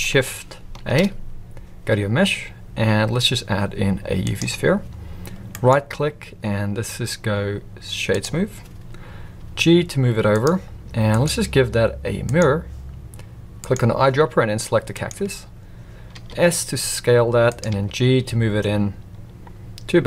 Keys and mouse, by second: 0.9 shift+a, 5.6-8.2 right drag, 9.3 g, 11.1-12.3 drag, 13.6 click, 16.1 s, 17.7 g.